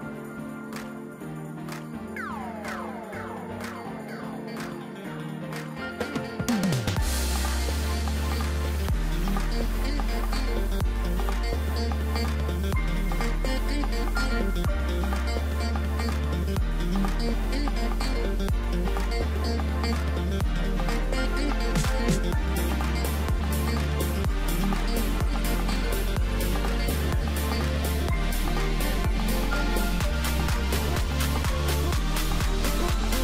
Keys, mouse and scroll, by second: 0.2 shift+click, 0.4 shift+click, 1.5 shift+click, 2.2 scroll down 2, 2.3 middle click, 2.8-3.5 scroll up 4, 3.5 1, 4.0-5.3 middle drag, 5.3-8.4 drag, 8.8-10.3 drag, 10.3-11.8 middle drag, 11.8 click, 13.5 g, 17.1 Tab, 17.3 scroll down 1, 17.5 middle click, 18.3-18.6 scroll up 2, 18.6-19.4 right drag, 19.4-20.7 middle drag, 20.7 Tab, 21.0-22.2 scroll up 1, 22.2 a, 22.5 3, 23.3 e, 25.0 Tab, 25.3 scroll down 1, 25.5-27.7 middle drag, 27.7 drag, 28.4 click, 29.7 click, 30.1-32.3 middle drag, 32.3-32.8 scroll up 1, 32.8-33.2 right drag.